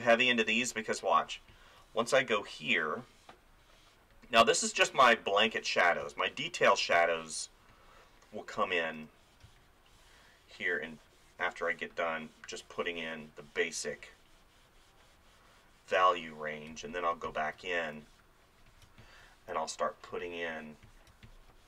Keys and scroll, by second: 0.5 space, 6.0 space, 9.5 space, 16.7 space, 17.8 [, 19.0 space, 19.5 [, 21.1 space.